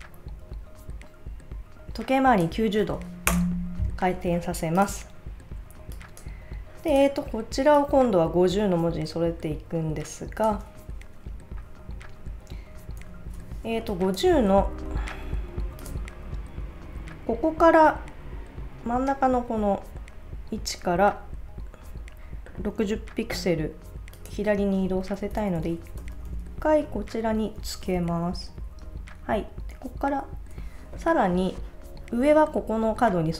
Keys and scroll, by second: 3.3 Return, 13.6 space, 27.6 Right, 28.6 Right.